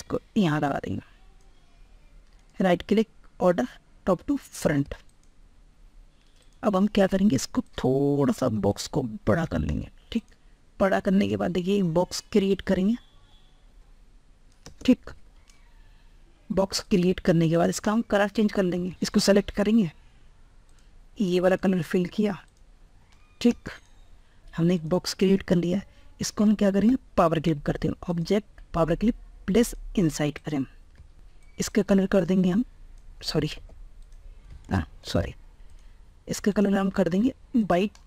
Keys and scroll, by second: 14.7 ctrl+Tab, 33.7 ctrl+z, 34.9 ctrl+shift+z.